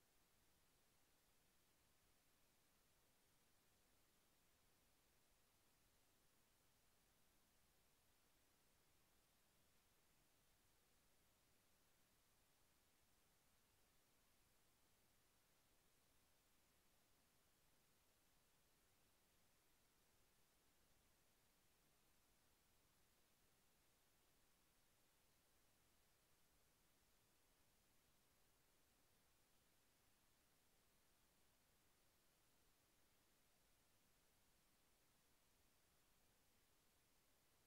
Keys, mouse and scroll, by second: 0.5 d, 2.2 f, 6.5 z, 10.8 c, 13.6 r, 16.7 b, 25.4 click, 28.2 h.